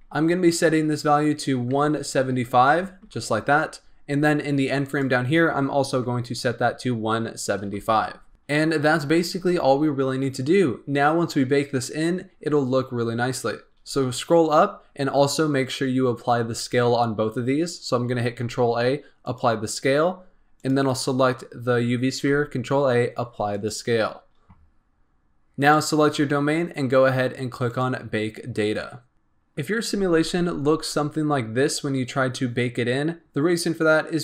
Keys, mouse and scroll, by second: 0.8-3.9 drag, 4.8-8.3 drag, 8.3-8.8 scroll down 4, 11.2-13.4 scroll up 2, 13.4-15.1 scroll up 14, 15.1-18.2 scroll down 1, 18.2 ctrl+a, 20.0-20.5 scroll up 2, 20.5 click, 22.1 ctrl+a, 25.5 click, 27.6-29.1 drag.